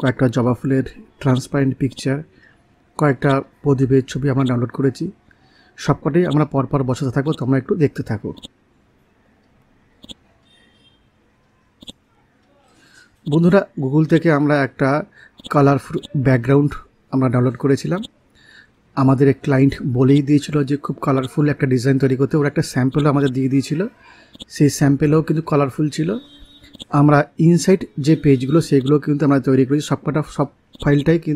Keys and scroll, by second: 0.5 t.